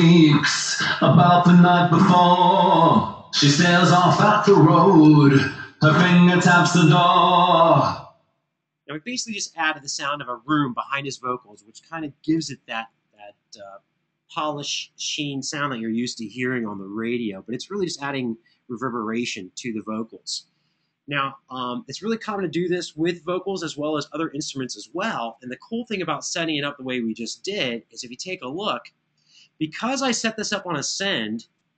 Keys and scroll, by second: 4.8 space, 6.3 super+=, 9.8 super+=.